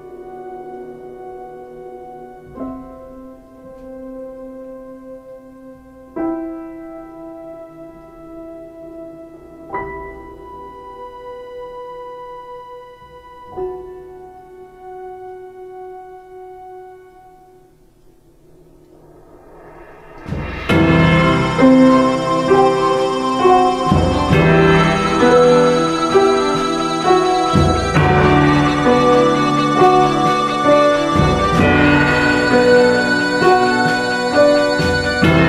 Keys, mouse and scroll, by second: 1.1 ctrl+space, 6.9 ctrl+space, 24.6 ctrl+space, 32.6 space.